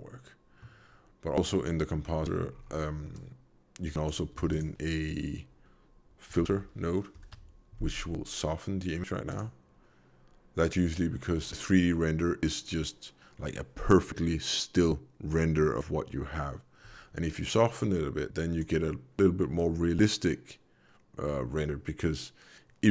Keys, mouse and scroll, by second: 1.5 click, 1.9 middle click, 2.5 scroll up 3, 3.1 click, 4.3 shift+a, 17.7 click.